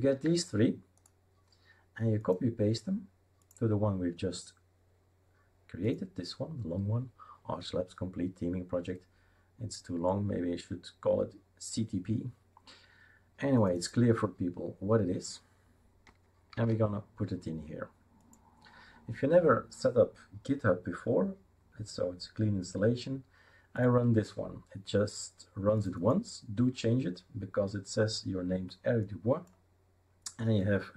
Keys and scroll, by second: 16.5 ctrl+v.